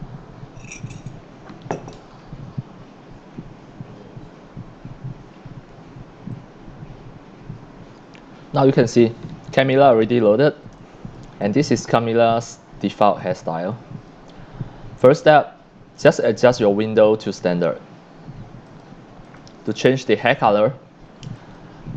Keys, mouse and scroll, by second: 9.5-10.4 scroll up 13, 10.5 x, 10.8-11.1 drag, 10.8 x, 11.3 x, 11.4 drag, 11.8-12.7 scroll up 8, 13.0 x, 13.2-13.7 drag, 14.1-15.6 drag, 16.0 click, 16.5 click, 18.7 click, 19.2 click, 19.8 click, 20.2 drag, 21.4 click.